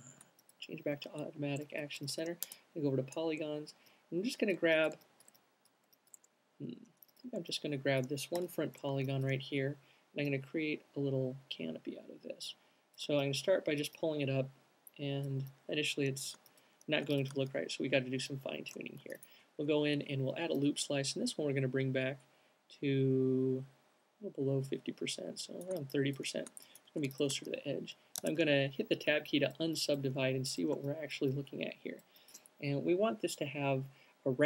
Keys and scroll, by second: 1.2 alt+q, 8.7 alt+shift+b, 17.4 alt+q, 18.2 c, 27.2 alt+q, 28.5 Tab.